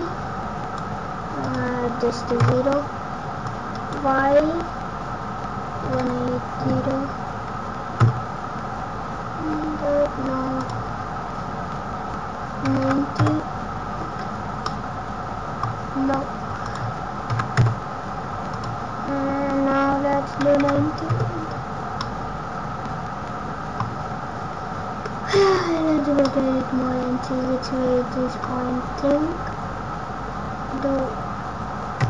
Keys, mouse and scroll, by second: 1.4 click, 3.4 click, 10.6 click, 14.6 middle click, 16.6 click, 18.4 click, 21.9 middle click, 25.3 Tab, 25.8-26.2 scroll up 1, 26.2 middle click, 29.2 scroll up 1, 31.9 Tab.